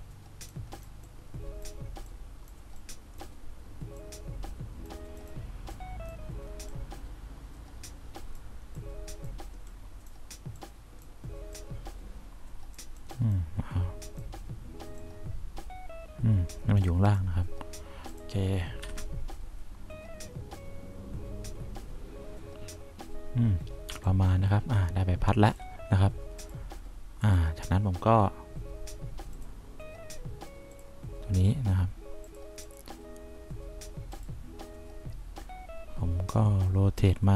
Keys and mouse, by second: 14.0 click, 15.3-17.0 drag, 19.2 F1, 24.2 3.